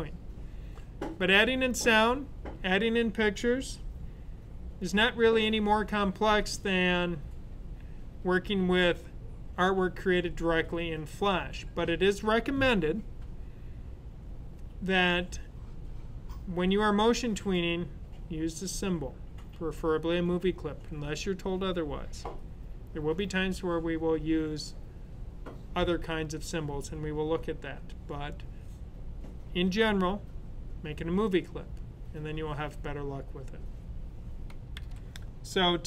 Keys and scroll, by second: 34.8 typing.